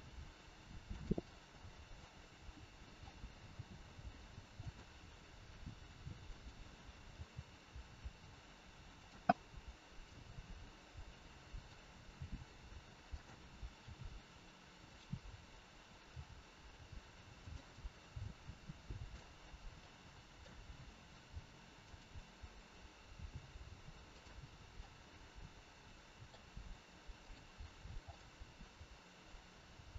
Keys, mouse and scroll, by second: 1.1 scroll up 1, 1.2 middle click, 2.1 scroll down 2, 2.6 middle click, 3.4 g, 5.4 r, 9.2 middle click, 10.2 scroll up 1, 11.0 middle click, 11.0 scroll up 2, 12.1 g, 13.7 r, 17.6 scroll up 1, 17.7 middle click, 20.6 middle click, 20.6 g, 24.0 click, 24.7 middle click, 27.1 click, 28.1 middle click, 29.7 click.